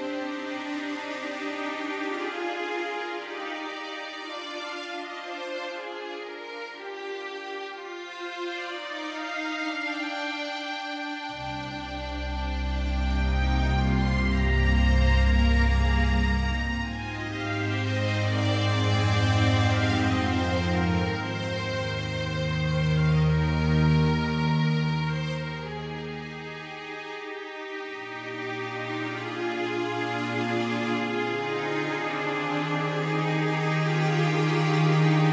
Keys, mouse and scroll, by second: 5.7 alt+g, 7.3 r, 10.2 middle click, 12.4 middle click, 13.0-14.7 drag, 17.3 a, 18.0 a, 20.9 z, 21.6 a, 23.5 b, 30.6 x.